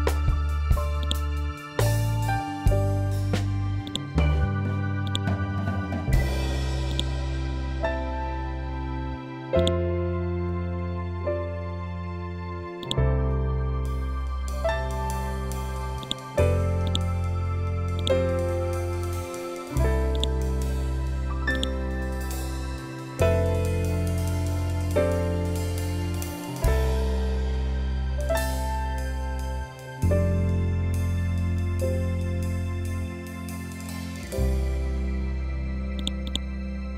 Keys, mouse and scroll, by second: 3.8-9.5 ctrl+drag, 12.7-20.0 ctrl+drag, 32.9 scroll down 1, 35.9 click.